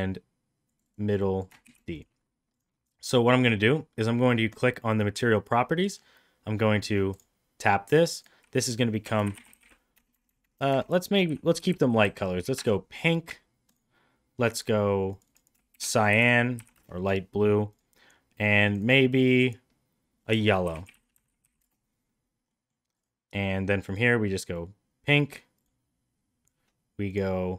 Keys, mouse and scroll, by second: 0.7 click, 0.8-2.0 drag, 4.5 click, 5.8 middle click, 7.1 click, 8.0 click, 8.2-13.1 drag, 10.1 BackSpace, 10.3 BackSpace, 13.7 click, 15.1 click, 15.2-17.3 drag, 18.7 click, 18.8-22.0 drag, 21.1 l, 22.5 middle drag, 23.0 click, 25.6 click.